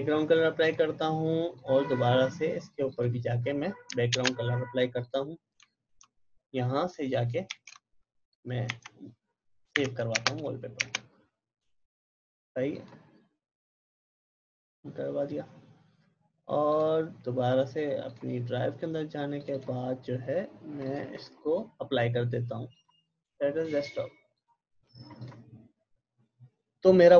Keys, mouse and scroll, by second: 0.6 click, 4.2 ctrl+BackSpace, 5.0 click, 7.4 ctrl+shift+s, 8.6 Tab, 9.7 j, 10.2 Return, 12.7 click, 16.7 click, 21.2 right click, 22.7 click.